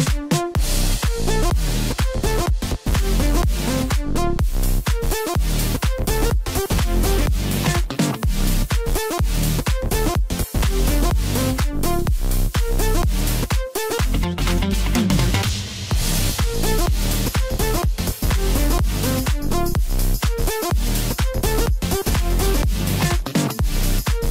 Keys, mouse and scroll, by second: 1.5 KP_1, 2.5-5.5 middle drag, 5.5 click, 8.1 s, 11.7-12.7 middle drag, 12.7 scroll up 2, 13.0-16.0 middle drag, 16.2-18.5 middle drag, 18.5 KP_1, 21.7 click, 22.8-24.3 drag.